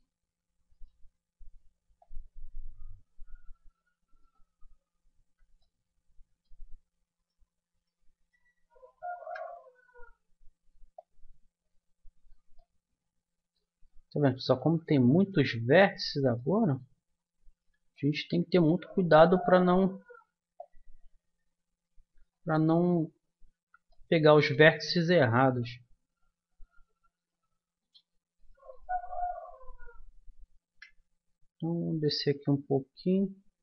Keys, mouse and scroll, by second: 1.8 right click, 2.0 middle click, 2.5-3.6 drag, 5.2 ctrl+z, 7.2-9.9 drag, 9.2 KP_1, 9.9-11.0 middle drag, 11.0-12.5 drag, 12.6-14.5 middle drag, 14.6 ctrl+z, 15.8 click, 19.0 KP_1, 20.6-22.4 drag, 23.5 ctrl+z, 23.9-25.0 middle drag, 26.1-30.4 drag, 30.6 KP_1, 32.4-33.6 drag.